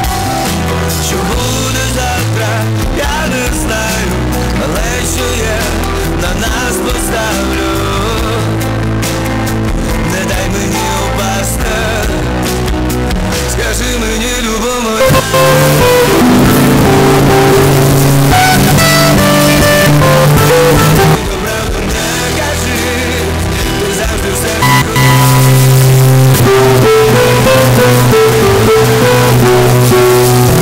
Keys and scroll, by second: 1.8 c, 2.1-3.3 Up, 4.3 Up, 4.4 Return.